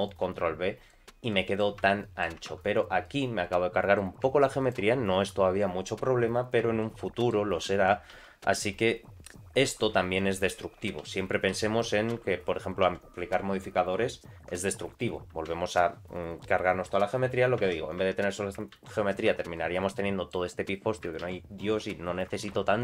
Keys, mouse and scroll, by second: 0.3 middle click, 1.3 middle click, 1.8 Tab, 2.0 middle click, 2.3 Tab, 2.5 3, 2.7 click, 3.0 middle click, 4.6 shift+click, 6.2-6.6 scroll up 2, 6.8 shift+middle click, 8.2 ctrl+z, 8.6 ctrl+z, 11.0 ctrl+z, 11.5 ctrl+z, 12.2 ctrl+z, 15.3 Tab, 17.6 Tab, 18.0 Tab, 18.8 ctrl+a, 19.4 Tab, 19.5 middle click, 20.4-20.8 scroll down 2, 21.0 scroll down 1, 21.2 ctrl+z, 22.6 Tab.